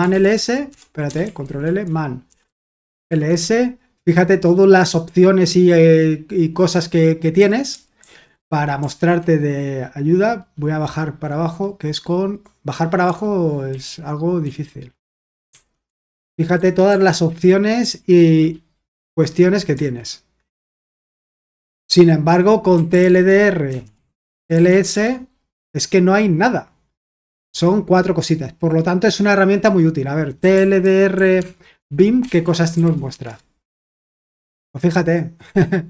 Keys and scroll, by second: 0.0-1.0 typing, 1.4 ctrl+l, 2.2-3.5 typing, 7.7-8.1 typing, 13.0-14.4 typing, 15.4-17.7 typing, 19.5-20.2 typing, 21.2 typing, 22.5-25.1 typing, 30.1-33.4 typing.